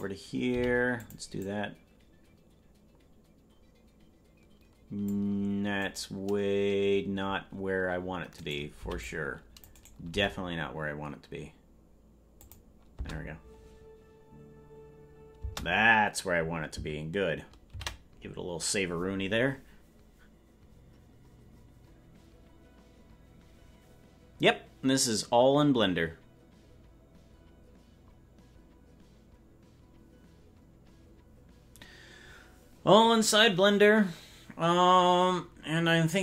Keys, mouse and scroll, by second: 1.5-5.2 drag, 1.5 g, 5.8-8.7 right drag, 8.7 c, 10.1 g, 12.9 space, 15.5 space, 21.0 ctrl+s.